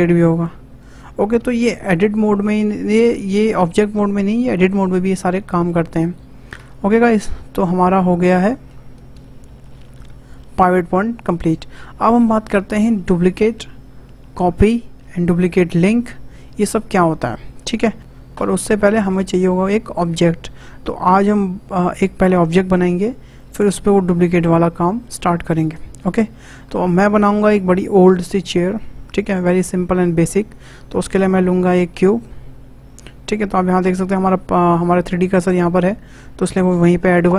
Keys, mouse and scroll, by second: 6.5 Tab, 9.1 Delete, 17.9 scroll down 3, 18.5-18.8 scroll up 3, 18.8-19.2 shift+middle drag, 19.2-22.3 shift+scroll down 2, 26.2-26.6 scroll up 2, 26.6-29.4 shift+middle drag, 29.4-29.7 scroll down 2, 29.7-31.0 shift+middle drag, 31.0 shift+a, 35.9-37.3 shift+middle drag.